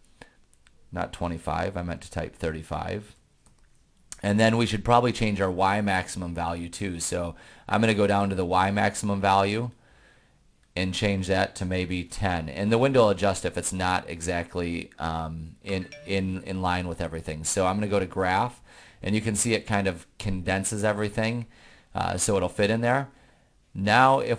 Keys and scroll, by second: 1.6 Left, 2.2 Left, 3.3 3, 3.7 5, 8.8 Down, 9.7 Down, 10.8 Down, 11.9-12.8 typing.